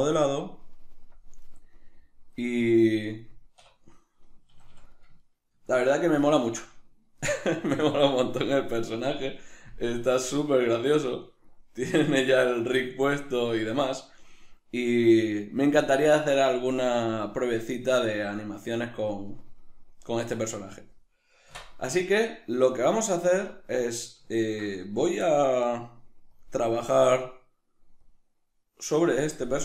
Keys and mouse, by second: 0.1-1.4 drag, 1.4-4.1 right drag, 3.7 \, 4.1-26.3 middle drag, 4.5 a, 10.7 Right, 21.6 \, 23.2 z, 26.3-29.6 drag.